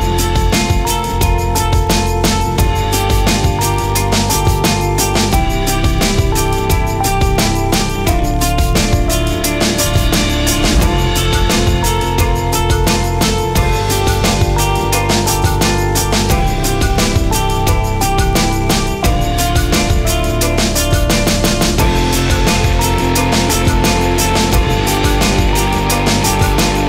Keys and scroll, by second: 12.2-13.1 typing, 13.4 Return.